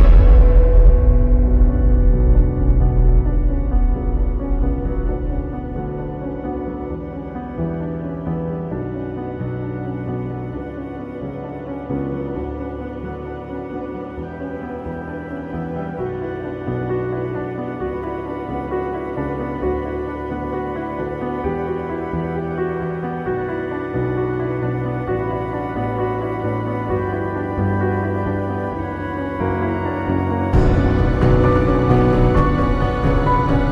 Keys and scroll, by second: 0.6 [, 6.9 space, 8.3-9.1 typing, 9.7 ctrl+z, 12.8 ctrl+t, 30.5 space.